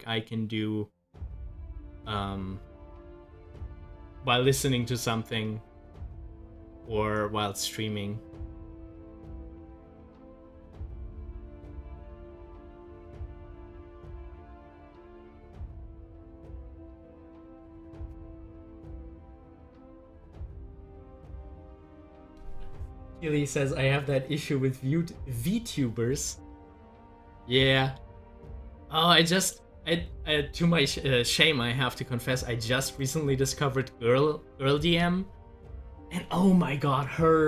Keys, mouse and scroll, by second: 4.7-10.0 drag, 14.2-15.6 drag, 19.8-27.6 drag, 27.6-29.3 drag, 31.8 scroll up 1.